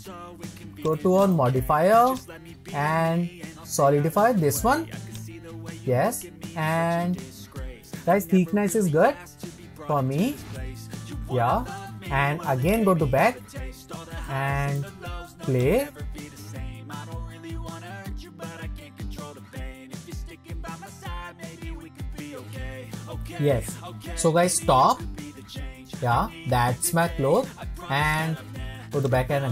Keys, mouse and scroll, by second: 1.2 click, 2.1-5.2 drag, 9.2-10.2 scroll down 4, 10.2-12.6 shift+middle drag, 12.6 click, 13.4-13.8 scroll down 4, 13.9-15.6 shift+middle drag, 15.6 click, 19.5-21.9 middle drag, 24.8 click, 25.3-25.8 scroll up 4, 25.8-28.1 middle drag, 28.1-29.5 drag.